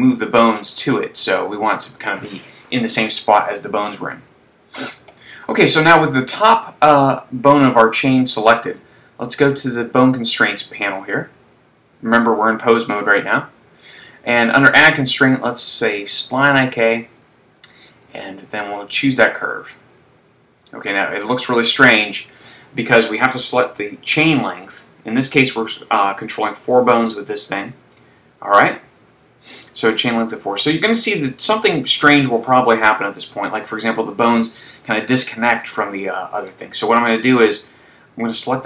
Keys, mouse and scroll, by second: 0.0 click, 0.5 KP_3, 3.2 shift+middle click, 5.1 right click, 9.7 click, 11.3 click, 14.4 click, 18.1 click, 24.9 click, 25.7 click, 26.6 click, 37.9 click.